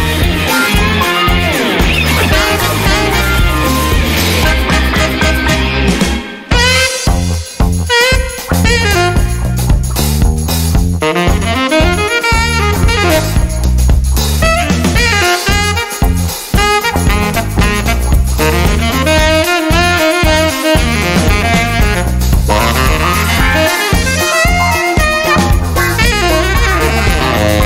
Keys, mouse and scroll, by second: 1.4-3.1 drag, 4.3-4.8 scroll up 1, 5.8-6.2 scroll down 1, 7.3 1, 9.2 click, 13.1 2, 15.0 2, 15.6 3, 16.3 click, 17.6 2, 20.8 3, 25.0 click, 26.4 right click, 27.5 click.